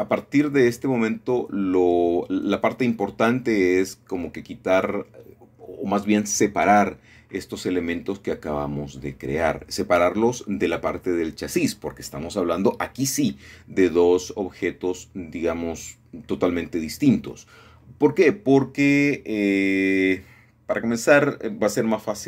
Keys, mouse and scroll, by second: 0.2 shift+middle click, 4.6-6.2 scroll down 3, 6.2 middle click, 7.8-9.3 middle drag, 9.9-13.0 middle drag, 13.0 middle click, 14.0-15.0 middle drag, 14.4-15.7 scroll down 2, 21.0 middle click, 21.3-21.8 scroll up 4.